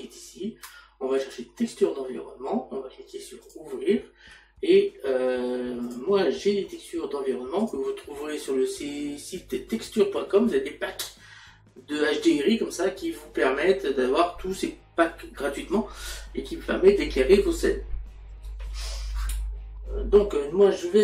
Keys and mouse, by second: 1.2 click, 4.4 click.